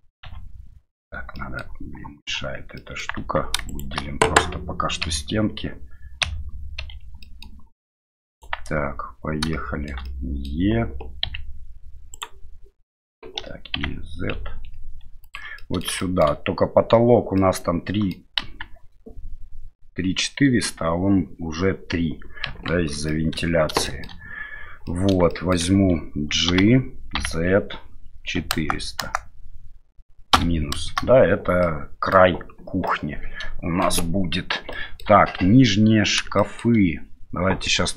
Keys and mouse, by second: 0.2 KP_Divide, 1.4 middle click, 2.8 middle click, 3.2 Tab, 3.7 shift+right click, 5.0 KP_Divide, 6.2 KP_Divide, 6.8 KP_Divide, 7.2 middle click, 8.3 right click, 8.7 Tab, 9.5 shift+middle click, 10.1 middle click, 11.2 z, 13.4 e, 15.6 middle click, 16.0 middle click, 17.4 middle click, 18.4 KP_1, 22.5 KP_3, 23.1 middle click, 23.9 middle click, 25.0 middle click, 25.4 middle click, 26.5 g, 31.7 middle click, 33.0 middle click, 34.8 shift+middle click, 36.4 shift+middle click.